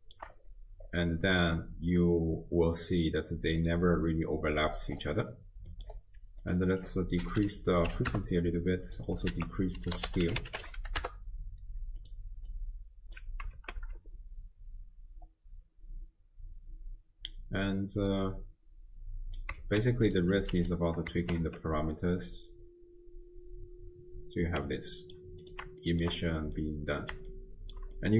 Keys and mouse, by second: 1.5 space, 5.7 middle click, 6.4-8.2 drag, 9.0 click, 9.4 ctrl+a, 12.6-13.2 drag, 13.6 shift+space, 17.9 space, 18.2-19.5 drag, 19.6 shift+space, 20.1 click, 21.2 shift+space, 24.7-25.2 drag, 24.7 space, 25.5 click, 26.0 shift+click, 26.7-27.2 drag, 27.3-27.8 shift+drag, 28.0-28.1 drag.